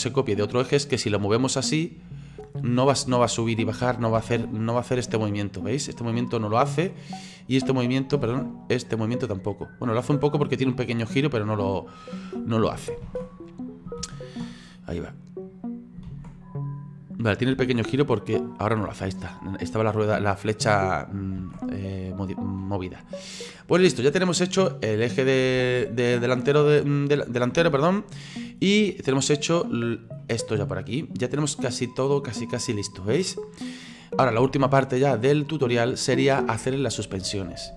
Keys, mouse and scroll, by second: 0.2-4.2 drag, 4.2 ctrl+z, 5.3-8.2 drag, 8.2 ctrl+z, 8.6-12.7 drag, 13.1 ctrl+z, 14.0 ctrl+z, 15.0-16.1 drag, 16.1 ctrl+z, 16.6 click, 17.6 ctrl+z, 18.3-21.4 drag, 21.4 ctrl+z, 22.1-24.5 middle drag, 24.5-25.6 drag, 25.6 ctrl+z, 26.1-27.6 drag, 27.6 ctrl+z, 28.0-28.7 middle drag, 28.7-29.7 scroll down 3, 29.7 right click, 30.2 middle click, 31.1-34.4 drag, 34.4 ctrl+z, 34.8-36.8 middle drag, 36.8-37.6 scroll up 3, 37.6-37.7 scroll down 1.